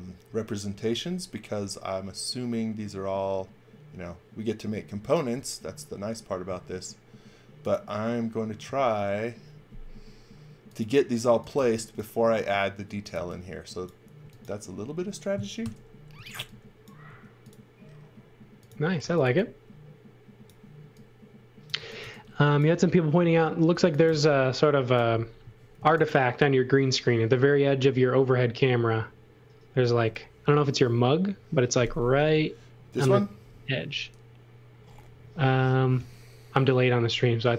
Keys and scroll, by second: 11.2 x, 11.6 v, 12.6-14.2 typing, 15.6-17.0 typing, 18.7-19.7 typing, 21.5-22.5 typing, 23.8 x, 24.0 v, 25.4 m.